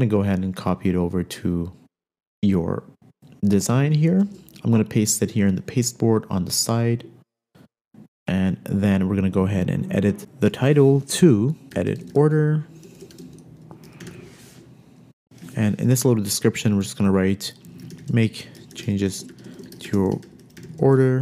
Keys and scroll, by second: 4.7 super+v, 11.6-15.1 typing, 15.2 super+z, 16.0 super+a, 17.9-19.0 typing.